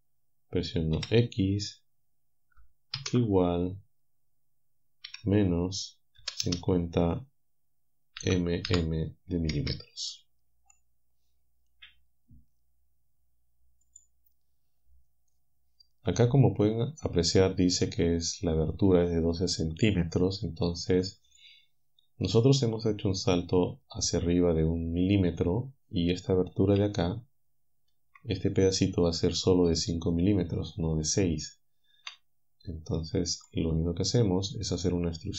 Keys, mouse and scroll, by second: 1.0 x, 3.0 shift+0, 5.1 -, 6.2 5, 6.5 0, 8.2 m, 8.7 m, 9.5 Return, 14.0 click, 33.4 alt+click.